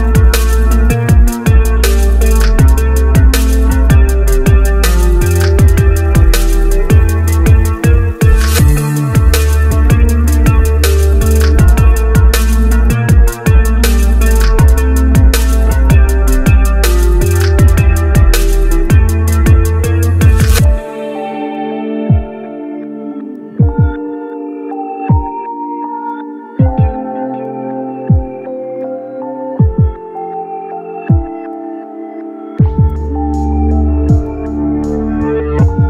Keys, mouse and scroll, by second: 9.0 right click, 32.2 ctrl+z.